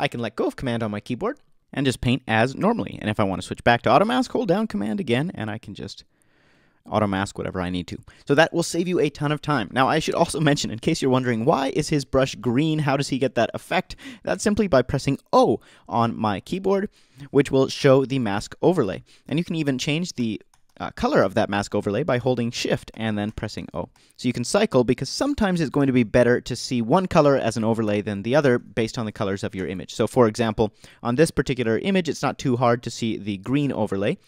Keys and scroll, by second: 14.3 BackSpace, 17.8 o, 19.9 shift+o, 25.8 shift+o, 27.9 shift+o, 29.6 shift+Delete, 30.2 BackSpace.